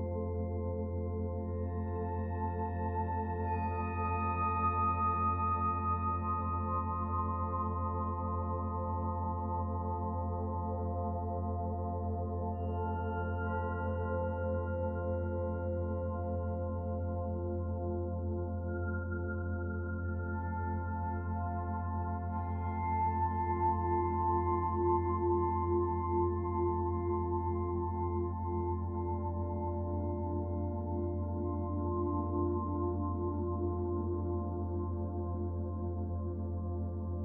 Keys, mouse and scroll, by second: 7.4 click, 9.4 click, 10.8 middle click, 11.6 scroll up 1, 12.0 shift+middle click, 14.5 click, 14.8 right click, 17.0 click, 17.1 click, 23.5 middle click, 24.1 shift+middle click, 24.8 middle click, 26.1 shift+a, 28.3 middle click, 30.7 s, 32.5 click, 33.9 middle click, 34.6 click, 36.0 click, 36.8 middle click.